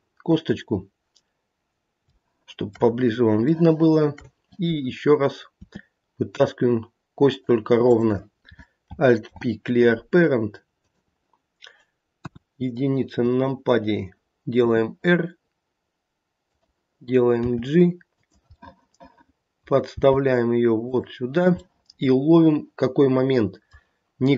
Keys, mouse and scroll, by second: 2.1 shift+middle click, 2.7 shift+middle click, 2.9 scroll up 4, 3.5 shift+middle click, 3.7 shift+middle click, 4.1 shift+middle click, 5.6 e, 7.8 click, 9.2 alt+p, 12.1 KP_1, 14.6 r, 17.4 g, 18.7 middle click, 19.4 middle click, 20.0 g, 21.6 middle click, 22.4 middle click, 23.6 middle click.